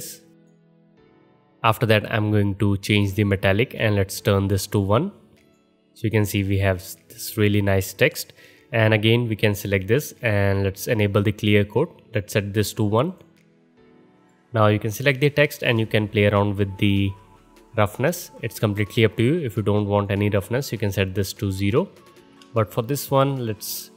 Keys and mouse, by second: 3.3-5.5 drag, 5.5-11.5 middle drag, 11.5-13.2 drag, 13.2-18.3 middle drag, 18.3-20.0 drag, 20.0-23.9 middle drag, 22.2 ctrl+z.